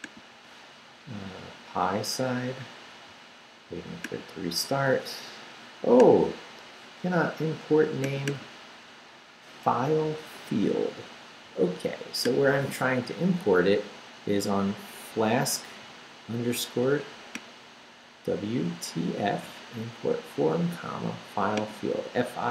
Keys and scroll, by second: 13.1 Up.